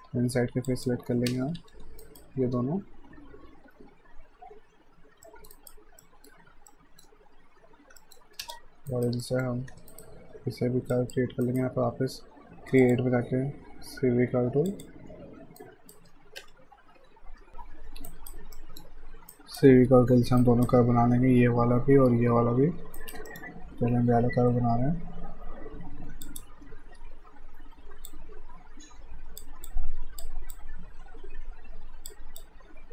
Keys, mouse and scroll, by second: 0.7 ctrl+click, 1.3 space, 1.6 f, 2.0 alt+right click, 5.3 middle click, 5.5 right click, 6.0 middle click, 8.0 middle click, 8.5 space, 8.9 right click, 9.2 middle click, 9.7 q, 9.9 right click, 10.9 click, 11.5 right click, 11.8 q, 12.8 click, 14.7 click, 15.6 alt+right click, 16.4 F5, 18.0 alt+Num_Lock, 18.1 alt+right click, 18.6 alt+middle click, 18.8-19.3 alt+scroll down 1, 19.3 alt+right click, 23.0 alt+right click, 23.3 middle click, 26.3 click, 28.1 click.